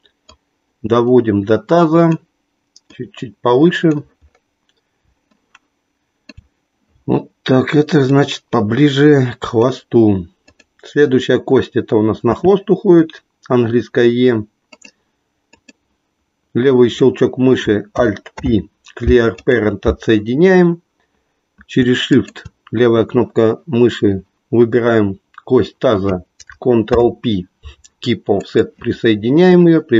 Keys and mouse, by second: 0.3-2.1 drag, 2.9-3.9 drag, 5.4-6.5 shift+middle drag, 8.0-9.7 drag, 13.5 e, 14.8 click, 15.5 click, 18.3 alt+p, 22.1 shift+click, 26.8 ctrl+p.